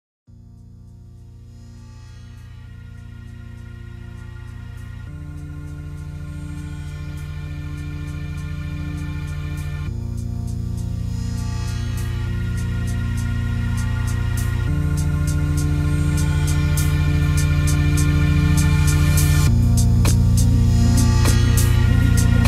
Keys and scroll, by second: 7.6 ctrl+space.